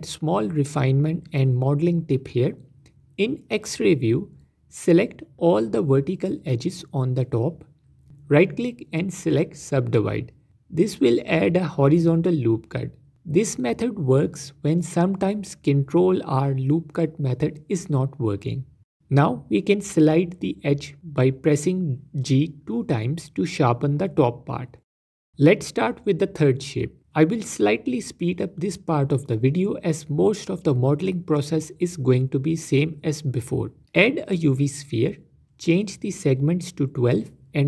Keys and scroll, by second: 2.6 Tab, 5.2 z, 8.3 z, 15.6 g, 15.7 g, 17.3 z, 18.9 z, 21.0 g, 21.6 Escape, 22.7 g, 22.7 g, 26.1 Tab, 27.6 alt+q, 33.9 shift+a, 37.1 z.